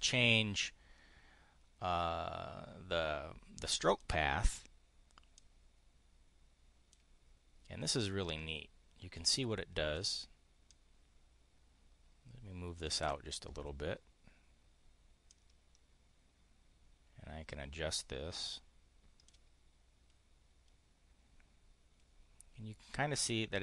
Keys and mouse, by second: 3.8 click, 5.3-6.9 drag, 7.9-10.0 drag, 10.6-12.9 drag, 15.2-19.3 drag.